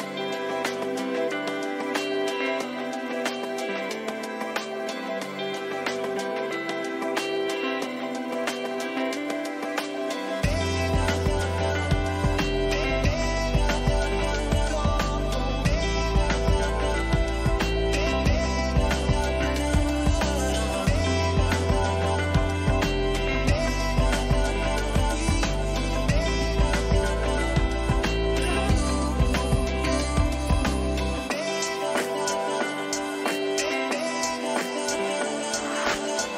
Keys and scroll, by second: 4.4 Return, 8.8 ctrl+alt+z, 11.9 ctrl+t, 18.0 Return, 20.1 ctrl+j, 20.9 ctrl+alt+z, 22.2 ctrl+alt+z, 25.2 ctrl+shift+z, 26.6 ctrl+t, 29.9 ctrl+t, 34.1 Return.